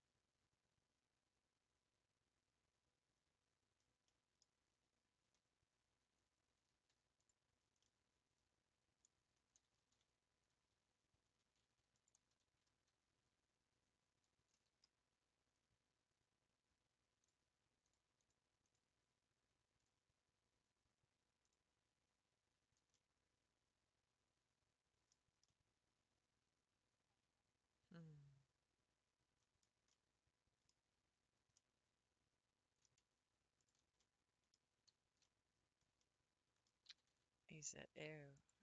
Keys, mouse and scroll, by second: 4.0-6.6 middle drag, 6.6 3, 7.3 click, 7.9-9.9 middle drag, 9.9 x, 10.5-11.2 scroll up 3, 11.3 1, 12.1 alt+click, 12.6 f, 13.3 scroll down 1, 14.5 a, 18.7 click, 19.4-20.6 scroll down 1, 21.5 click, 22.4 scroll down 2, 22.9-25.1 middle drag, 25.1-25.5 scroll up 3, 25.5-28.5 middle drag, 29.4-29.8 scroll down 4, 30.1-31.2 middle drag, 31.2 scroll up 1, 31.5-33.7 middle drag, 34.0-36.9 middle drag, 36.9 s.